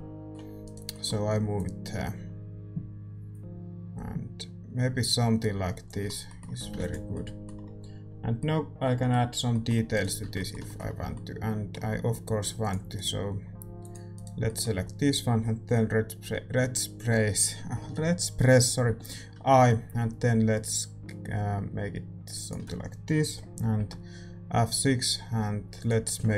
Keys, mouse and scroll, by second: 0.6-2.6 right drag, 0.9-3.4 drag, 6.0-12.2 middle drag, 6.5 a, 7.1 ctrl+s, 10.0-12.6 right drag, 10.2 Tab, 10.9 a, 12.6-18.8 drag, 13.8-18.8 right drag, 14.4-18.8 middle drag.